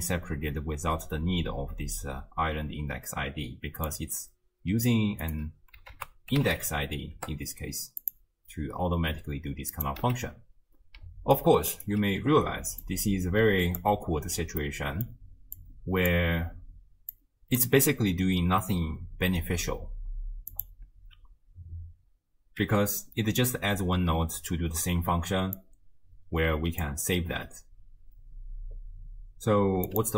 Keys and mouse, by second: 3.9-5.2 drag, 6.0 ctrl+a, 10.0 x, 11.0 d, 11.4 click, 11.9 d, 12.8 click, 12.8 d, 14.6 click, 15.6 click, 17.2 click, 20.6 click, 22.6 m, 25.6-26.9 drag, 29.9 click.